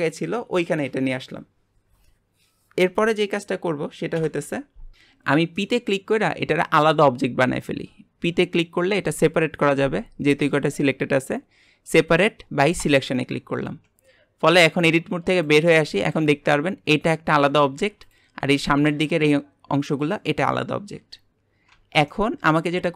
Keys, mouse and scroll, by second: 4.2 KP_1, 5.6 middle click, 6.4-6.9 scroll down 1, 6.9 p, 13.6 Tab, 15.3 click, 15.7 scroll down 4, 16.1 g, 18.0 click, 18.4 g, 20.9-21.3 scroll up 4, 21.7 Tab, 22.1 middle click.